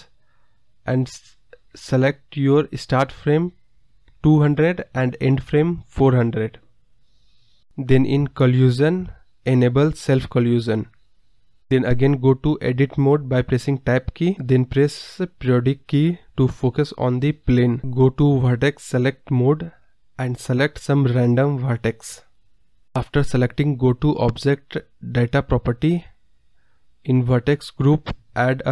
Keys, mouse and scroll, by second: 0.2-1.6 drag, 1.6-3.9 scroll down 32, 3.9-4.9 drag, 4.9 KP_0, 6.0 click, 6.7 KP_0, 7.7-8.3 scroll up 4, 8.3-9.8 scroll down 13, 9.8-10.2 drag, 10.2-11.6 scroll up 46, 11.6-12.1 scroll down 10, 12.1 Tab, 12.5 scroll down 1, 12.6-14.2 middle drag, 14.6 KP_Decimal, 15.1 scroll up 1, 15.2-16.5 middle drag, 16.5 click, 17.4 click, 18.7 click, 19.1 shift+click, 19.3 shift+click, 19.7 shift+click, 20.4 shift+click, 21.5 shift+click, 22.2 shift+click, 22.6 shift+click, 23.5 shift+click, 24.5 shift+click, 27.2 shift+click, 28.2-28.7 drag.